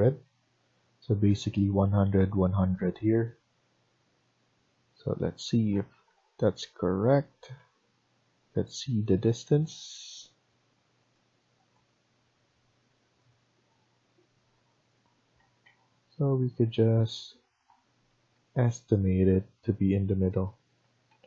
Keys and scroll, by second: 0.6 Escape, 3.0 Escape, 3.3 Escape, 5.9 Tab, 7.5 Escape, 15.6 Escape, 18.3 Down, 18.9 Down, 20.7 Escape, 21.0 Escape.